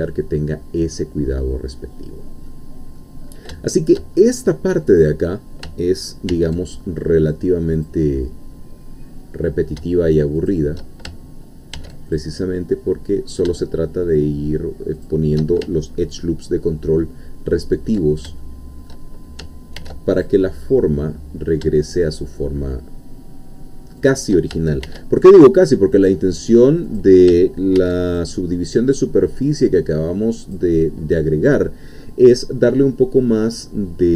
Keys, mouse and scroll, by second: 1.9-2.5 scroll down 2, 2.5 middle click, 3.2-3.7 scroll up 1, 3.7 shift+middle click, 4.1 shift+scroll up 1, 6.3 ctrl+r, 7.7 click, 10.4 shift+click, 11.7 ctrl+r, 12.2 ctrl+click, 15.0 shift+click, 18.4 ctrl+shift+middle click, 19.8 ctrl+r, 20.1 ctrl+click, 24.0 shift+click, 24.9 ctrl+r, 25.2 ctrl+click, 26.9 click, 27.8 ctrl+r, 28.1 ctrl+click, 30.4 click, 30.9 scroll down 1, 31.7 scroll down 1, 33.0-33.3 scroll down 1.